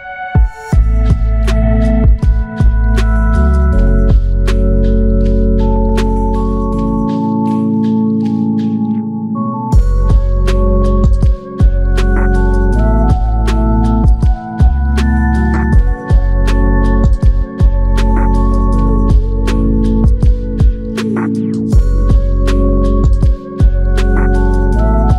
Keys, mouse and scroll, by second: 2.2 ctrl+alt+click, 3.1 ctrl+alt+click, 17.6 alt+click, 19.7 alt+click, 24.7 ctrl+alt+click.